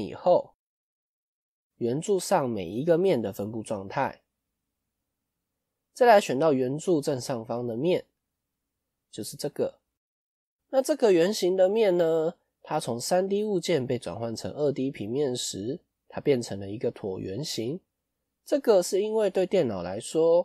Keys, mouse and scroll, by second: 5.7 click, 8.0 click.